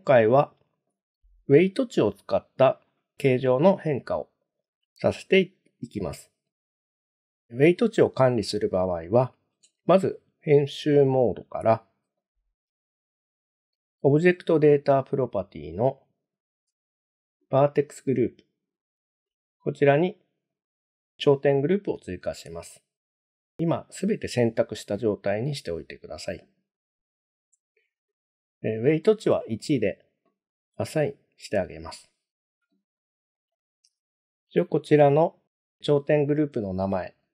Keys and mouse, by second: 5.1-5.7 middle drag, 10.5 Tab, 12.2 shift+middle click, 15.2 click, 20.5 click, 25.5 a, 30.8 click, 33.3 click, 33.7-37.3 drag.